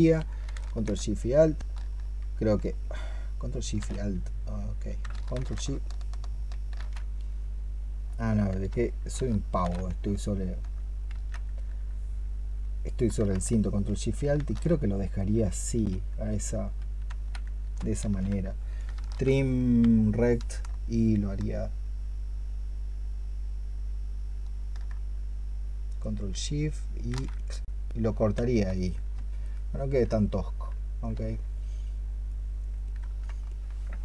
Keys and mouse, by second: 9.1 ctrl+shift+click, 17.9 ctrl+z, 19.9 ctrl+shift+click, 29.3 ctrl+click, 32.8 ctrl+click.